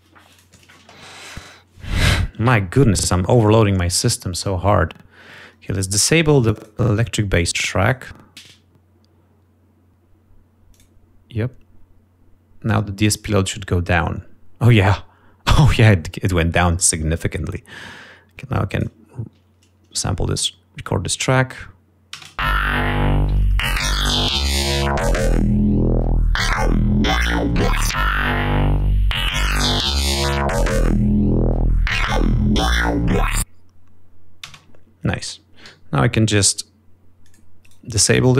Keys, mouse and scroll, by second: 4.8-5.6 scroll down 4, 5.8 scroll up 2, 6.4 click, 7.6 right click, 10.3 right click, 11.7 click, 16.7-17.4 scroll up 4, 18.4 ctrl+scroll down 2, 19.5 click, 23.1 shift+space, 23.8 ctrl+scroll up 2, 28.3 ctrl+scroll down 2, 33.6 ctrl+scroll up 2, 35.4 space, 36.6 g, 37.3 click, 38.2 click.